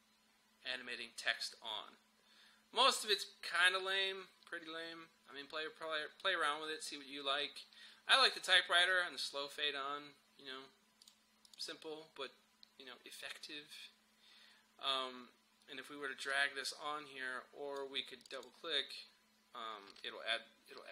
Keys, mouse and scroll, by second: 3.8-4.1 scroll up 1, 5.4-7.2 scroll down 1, 7.7 scroll down 1, 10.2-11.1 scroll down 1, 11.1 click, 16.4-18.3 drag.